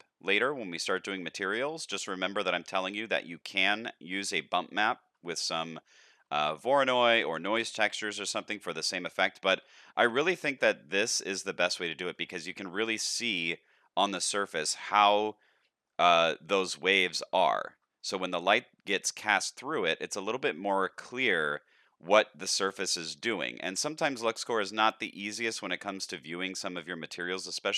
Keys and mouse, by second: 0.3-0.7 shift+middle drag, 0.9-1.3 middle drag, 1.5-1.8 shift+middle drag, 2.1 middle drag, 2.7 shift+middle drag, 4.0 shift+middle click, 5.3 shift+middle drag, 5.9 middle drag, 6.4 shift+middle drag, 6.9-7.2 middle drag, 7.5 shift+middle click, 8.9-9.5 middle drag, 9.7-10.1 shift+middle drag, 10.4-11.1 middle drag, 11.7-12.1 shift+drag, 14.2 shift+drag, 14.8-15.9 drag, 18.0 shift+click, 19.7-20.3 middle drag, 20.5-20.9 shift+middle drag, 21.2 middle click, 23.9-24.2 shift+middle drag, 24.4 middle drag, 25.3 shift+middle click, 25.8-26.5 middle drag, 27.2 shift+middle drag, 27.6-27.7 middle drag.